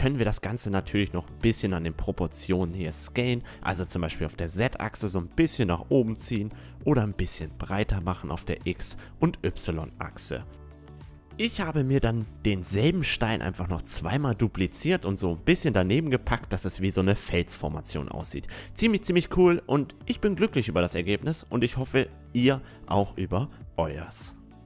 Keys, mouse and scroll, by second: 0.1 middle click, 1.3 s, 4.3 a, 5.7 right click, 6.2 s, 8.9 s, 11.1 a.